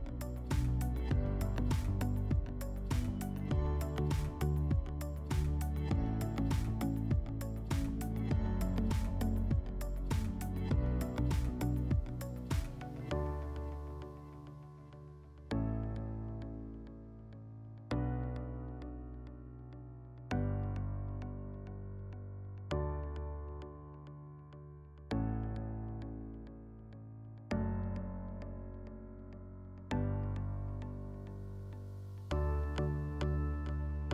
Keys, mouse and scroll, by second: 7.2 scroll, 8.9 click, 9.5 click, 10.5 middle click, 11.6 click, 12.5 click, 13.8 click, 14.0 click, 14.6-17.0 typing, 16.3 Tab, 17.4 Return, 20.2 middle click, 21.8-22.2 scroll, 22.0 middle click, 22.3 click, 22.9 drag, 23.1 drag, 23.4-24.1 middle drag, 24.1-24.6 drag, 25.6 shift+click, 27.7-29.1 drag, 29.4 click, 29.8 click, 30.6 1, 30.7 Tab, 30.9 1, 32.0-32.4 drag, 32.9-34.1 drag.